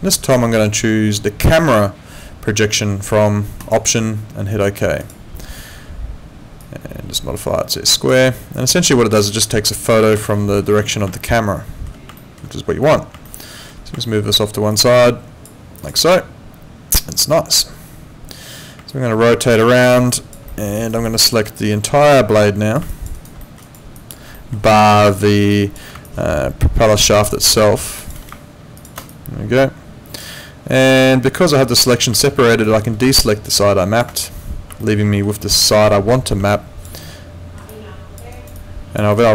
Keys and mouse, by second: 1.4 click, 3.6 click, 5.0 click, 6.6 click, 9.3 alt+middle click, 10.3 alt+middle click, 11.1 alt+middle click, 12.2 alt+middle click, 13.3 alt+middle click, 14.0 alt+middle click, 14.7 click, 15.8 click, 18.9 alt+click, 20.1 alt+click, 20.5 alt+middle click, 20.8 alt+right click, 21.0 alt+click, 22.9 alt+click, 23.1 alt+right click, 23.4 alt+middle click, 23.6 alt+right click, 24.0 alt+click, 24.3 alt+middle click, 24.6 alt+right click, 24.9 alt+click, 25.5 alt+click, 27.3 alt+click, 28.8 ctrl+shift+click, 29.1 alt+click, 31.0 alt+middle click, 32.2 alt+middle click, 32.5 alt+right click, 33.3 ctrl+click, 34.8 alt+middle click, 36.5 alt+click, 37.0 alt+middle click, 37.7 alt+click, 38.3 alt+right click, 38.5 alt+click, 39.1 alt+middle click.